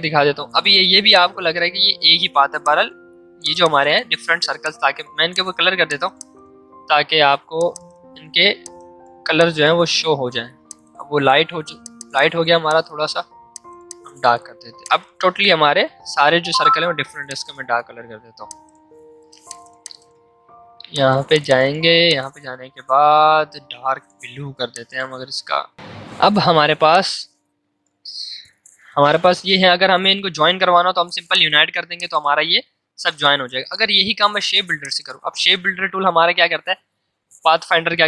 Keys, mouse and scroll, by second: 17.2 click, 18.2 v, 18.4-30.0 drag, 31.3 click, 32.8 ctrl+z, 34.8 click.